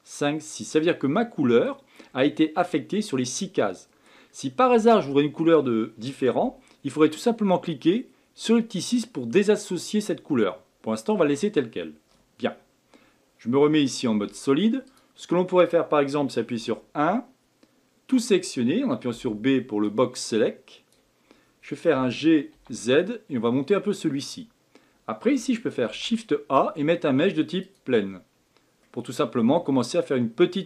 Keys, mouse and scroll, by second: 1.2-6.5 middle drag, 10.0-13.2 middle drag, 16.5 KP_1, 19.1 b, 25.8 shift+a, 28.8-30.6 middle drag.